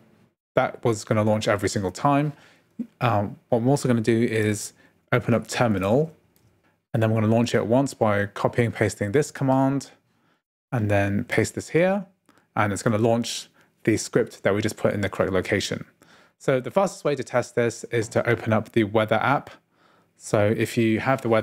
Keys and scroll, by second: 4.5-6.9 typing.